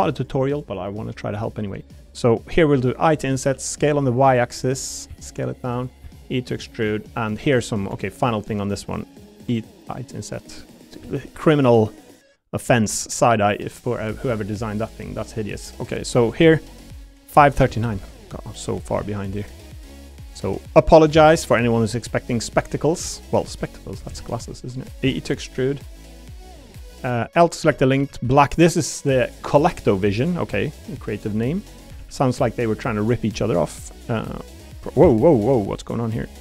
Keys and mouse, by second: 0.5 click, 2.7 i, 3.4 s, 3.7 y, 5.1 s, 6.0 e, 6.7 click, 8.2 shift+click, 9.4 i, 11.0 a, 11.2 g, 12.7 click, 13.5 middle click, 13.7 middle click, 14.1 shift+click, 14.2 shift+middle click, 16.4 middle click, 17.7 Tab, 17.9 Tab, 18.7 l, 19.0 middle click, 20.3 middle click, 21.1 shift+d, 22.9 click, 23.6 l, 24.1 shift+e, 24.8 right click, 25.0 e, 26.5 click, 27.2 click, 27.6 l, 28.0 a, 28.2 g, 29.0 click, 29.9 middle click, 30.5 middle click, 31.0 middle click, 31.4 middle click, 32.0 ctrl+r, 34.1 3, 34.3 click, 35.0 ctrl+z.